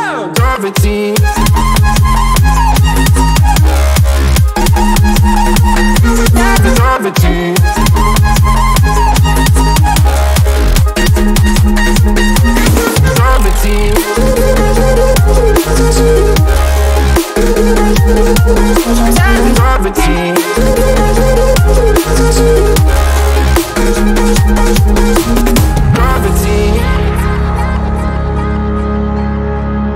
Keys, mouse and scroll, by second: 3.7-6.2 drag, 7.4 x, 8.1 click, 11.2-17.3 drag, 18.8-23.5 drag, 23.5 x, 24.3 click, 28.8 click.